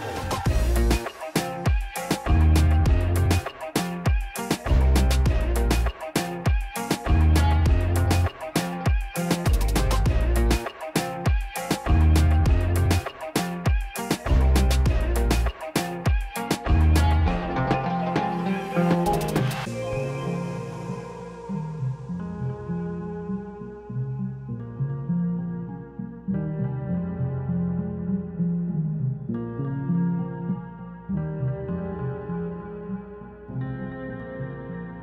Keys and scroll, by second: 16.4 2, 16.9 Return.